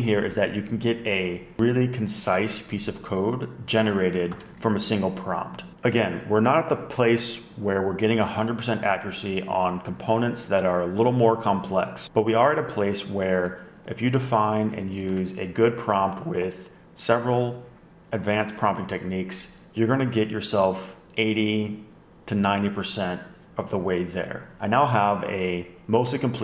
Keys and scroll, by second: 4.3 shift+super+[, 4.5 super+Up, 14.1 shift+super+Right, 14.6 Left, 14.8 Down, 14.9 Down, 15.1 shift+super+Right.